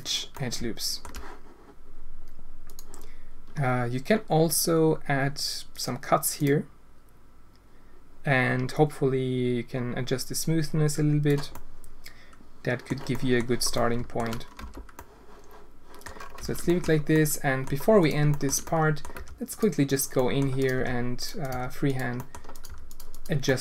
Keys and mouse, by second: 0.3 click, 0.6 alt+shift+click, 2.6 click, 5.7 click, 6.3 click, 8.7-11.2 drag, 11.6-12.8 drag, 13.2 click, 13.8 alt+shift+drag, 14.6 Tab, 14.9-16.0 drag, 16.4 Tab, 16.6 shift+drag, 17.1-17.6 drag, 17.9 click, 18.2 shift+click, 18.6 click, 18.7 click, 19.1 g, 20.1 drag, 20.7 g, 21.4 g, 22.5 click, 22.8 g, 23.4 click.